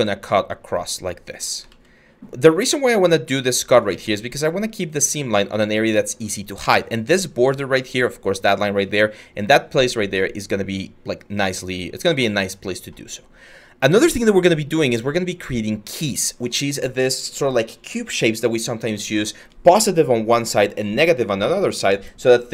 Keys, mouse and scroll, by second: 1.3 ctrl+z, 3.5 ctrl+z.